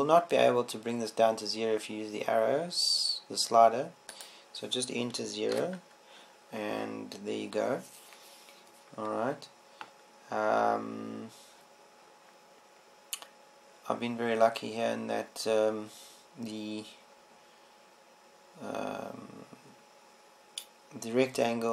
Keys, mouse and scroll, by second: 5.7-7.7 drag, 7.7-13.1 middle drag, 21.5-21.7 middle drag.